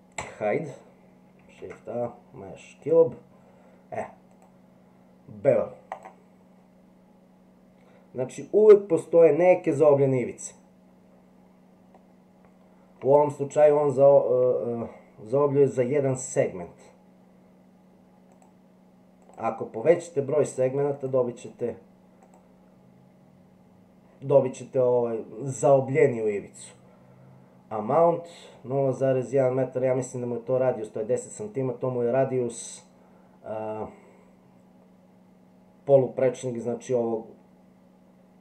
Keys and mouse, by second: 0.2 h, 1.6 shift+a, 4.3-6.0 drag, 11.9-13.0 middle drag, 18.3 click, 19.3 click, 19.8 click, 20.4 click, 21.0 click, 21.6 click, 29.0-30.2 middle drag.